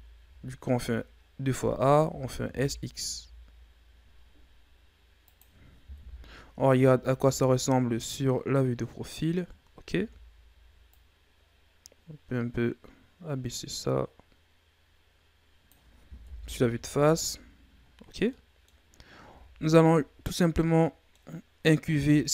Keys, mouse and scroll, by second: 0.2 a, 2.0 s, 5.9 KP_3, 6.8 Tab, 7.2 a, 7.5-8.4 scroll down 4, 8.4-9.1 scroll up 5, 9.1-10.0 scroll down 4, 10.0 Tab, 11.0-14.0 drag, 16.3 KP_1, 16.8 Tab, 17.4-18.3 scroll down 5, 18.3 middle click, 18.8-19.3 scroll up 4, 19.3 Tab, 20.3-22.3 middle drag.